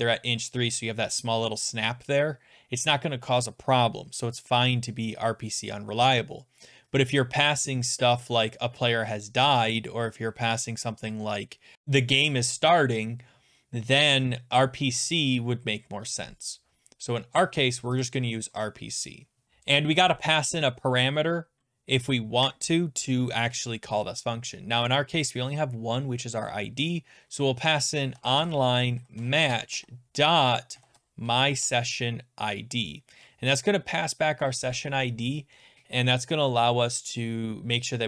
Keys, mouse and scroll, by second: 18.1 click, 18.2 click, 19.4 BackSpace, 27.7-31.2 typing, 31.6 Tab.